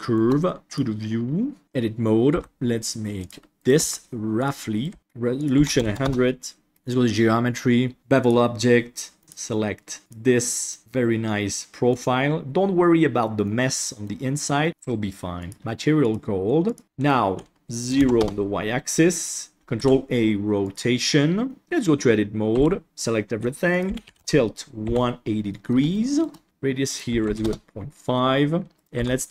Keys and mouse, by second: 0.0 shift+middle click, 0.6-1.6 drag, 1.6 Tab, 2.3 g, 3.5 right click, 3.7 g, 4.7 right click, 4.8 g, 5.5 click, 5.8 KP_0, 6.7 middle click, 8.2 click, 9.2 middle click, 9.2 click, 10.7-11.8 middle drag, 13.4-14.0 middle drag, 14.6 middle click, 16.0 click, 17.8 click, 18.8-19.2 middle drag, 19.7 ctrl+a, 21.5 middle click, 21.6 Tab, 22.5 a, 23.8 click, 24.8 KP_1, 25.9 shift+middle click, 26.9 click, 28.7 right click, 28.9 g.